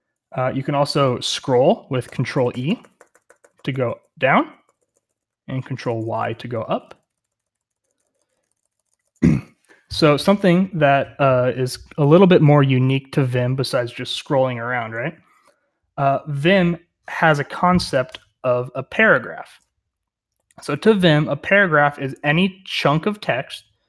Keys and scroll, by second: 5.0-5.9 ctrl+e, 6.6 ctrl+e, 7.7-9.0 ctrl+y, 9.8 ctrl+y.